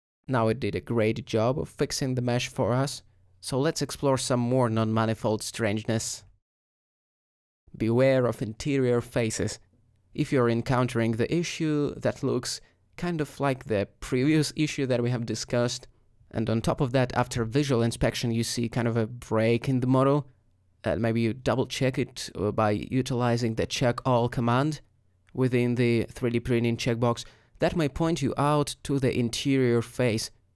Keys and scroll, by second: 2.3 Tab, 9.5 alt+g, 9.6 alt+y, 11.9 alt+g, 12.1 y, 15.0 h, 16.2 h, 21.3 alt+z, 26.6 z, 28.6 alt+z.